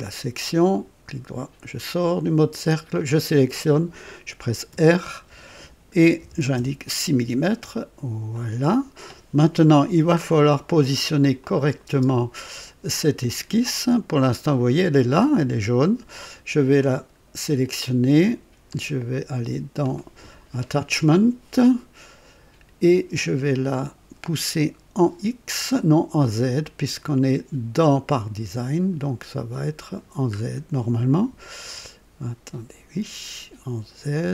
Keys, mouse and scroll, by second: 0.7 right click, 2.6 click, 4.6 r, 6.1 KP_6, 6.5 KP_Enter, 8.3 click, 10.1 scroll up 1, 11.3 click, 11.8 space, 16.7 click, 18.2 click, 18.7 click, 28.2-29.1 scroll up 4, 30.3-30.6 scroll up 2, 33.8-34.3 scroll up 3.